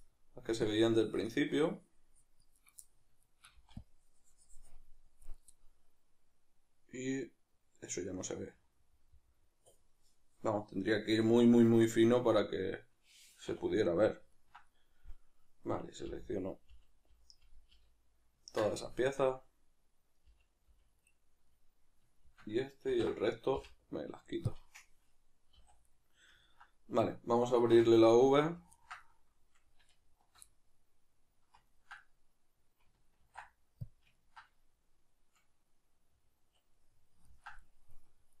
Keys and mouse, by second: 0.5 c, 2.6 right click, 3.6 c, 13.5 \, 16.1 l, 20.2 l, 22.9 ctrl+i, 25.6 a, 27.7 2, 28.3 alt+right click, 28.7-29.9 ctrl+middle drag, 29.9 alt+shift+right click, 30.4-38.4 middle drag, 33.1 ctrl+e.